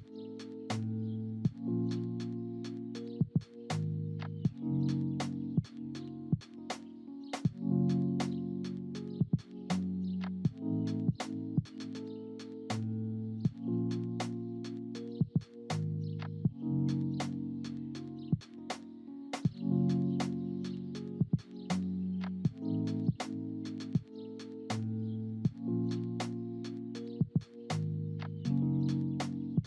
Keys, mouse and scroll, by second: 0.0 click, 4.6 space, 6.2-8.1 drag, 8.8 click, 9.6 click, 18.6 space, 19.6-22.8 drag, 28.0-28.4 drag, 29.3-29.6 drag.